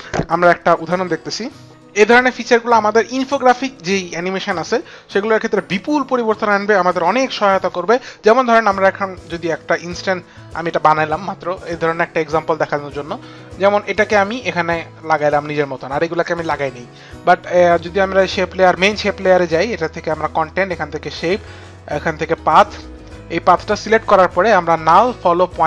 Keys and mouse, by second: 13.4 click, 17.7 click, 18.6 click, 19.7 click, 24.9 click.